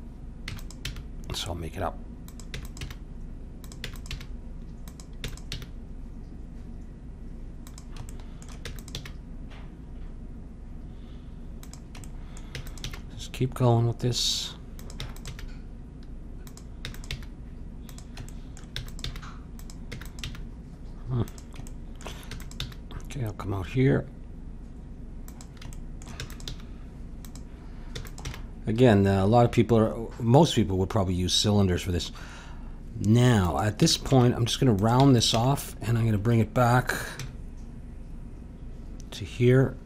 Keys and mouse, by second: 0.5 e, 0.9 g, 2.5 e, 2.8 g, 3.8 e, 4.1 g, 5.2 e, 5.4 g, 8.1-9.9 drag, 8.6 e, 9.0 g, 12.0 click, 12.5 e, 12.8 g, 15.0 e, 15.3 g, 16.8 e, 17.1 g, 18.3-19.8 drag, 18.7 e, 19.0 g, 19.8 e, 20.2 g, 22.2 e, 22.6 g, 25.7-28.0 drag, 26.2 e, 26.5 g, 28.0 e, 28.2 g, 33.8 e, 34.1 g, 35.0 e, 35.4 g.